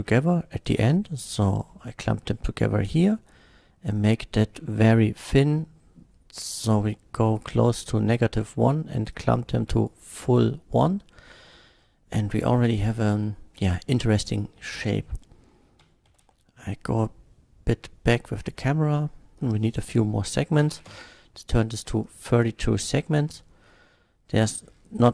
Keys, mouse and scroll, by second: 0.7 click, 1.7-2.8 middle drag, 4.0-7.3 drag, 9.1-9.9 drag, 10.1-11.5 middle drag, 12.9 KP_0, 14.3 click, 15.9 g, 16.1 z, 18.4 click, 19.4 Return, 20.7 KP_3, 20.9 Return, 20.9 KP_2, 22.0 drag, 22.4-23.7 middle drag, 24.7-25.1 scroll down 1.